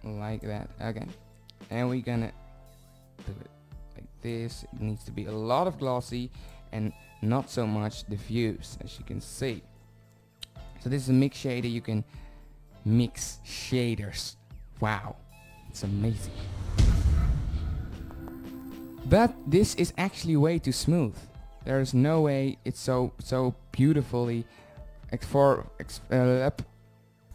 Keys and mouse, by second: 1.9 click, 4.4 click, 5.8 click, 10.8-11.8 drag, 11.8-15.5 middle drag, 25.3 middle click, 25.9 click.